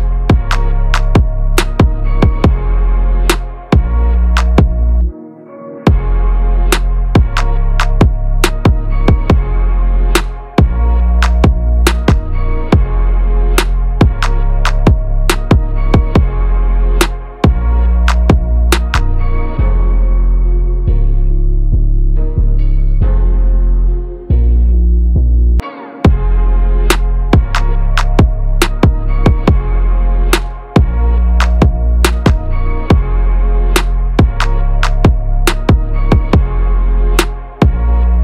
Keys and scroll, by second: 35.6 ctrl+=, 36.4 ctrl+space.